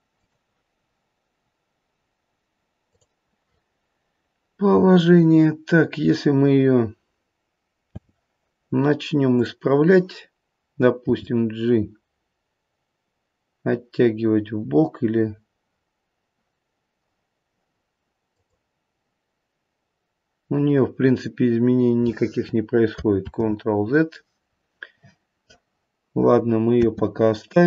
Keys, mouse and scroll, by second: 0.1 click, 2.8 click, 7.8 space, 9.3 click, 11.0 g, 23.3 ctrl+z, 26.8 space.